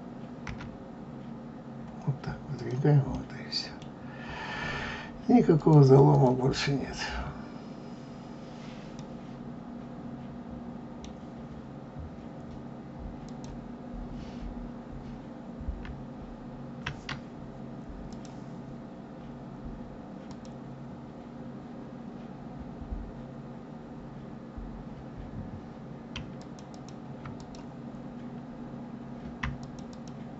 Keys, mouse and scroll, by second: 0.4 g, 3.1 middle click, 3.9-5.5 scroll down 5, 5.5 click, 6.1 click, 6.9 click, 8.9-11.9 middle drag, 13.2 click, 18.1 click, 19.0-19.5 scroll up 2, 20.2 click, 26.1 a, 26.3 click, 26.6 a, 26.7 click, 26.7-27.1 a, 27.3 click, 29.6 shift+click, 29.9 shift+click.